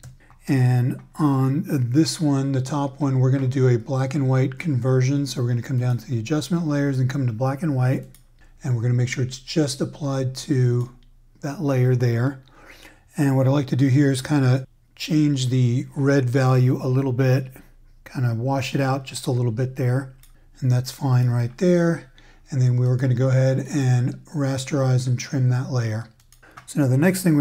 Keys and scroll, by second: 0.0 super+j.